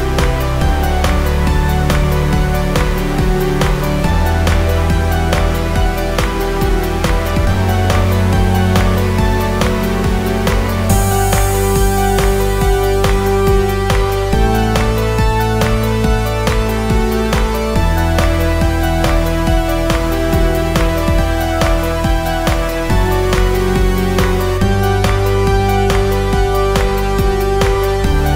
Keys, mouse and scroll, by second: 5.5 click, 10.3-14.9 drag, 17.8-21.3 drag, 21.3-25.5 drag, 25.9-28.3 drag.